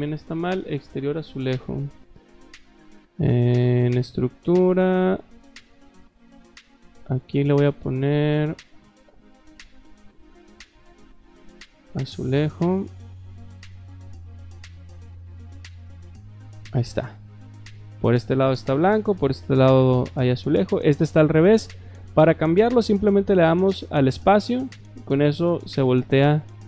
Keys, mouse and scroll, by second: 1.1 click, 3.6 click, 6.3 click, 6.8 click, 9.0 click, 9.7-10.9 typing, 11.9 click, 13.0 click, 14.1 click, 15.1 click, 15.8 scroll up 1, 16.2 click, 17.7-19.4 shift+middle drag, 20.5 click, 23.6 space, 24.2 click, 25.1 shift+middle click, 26.1 middle click.